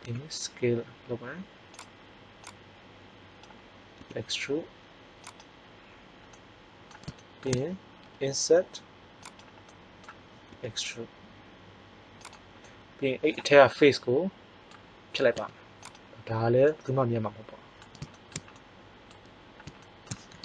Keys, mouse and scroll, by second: 0.0 s, 2.4-3.9 drag, 3.9 e, 8.0 i, 9.3 click, 10.5 e, 12.6 middle click, 15.4 x.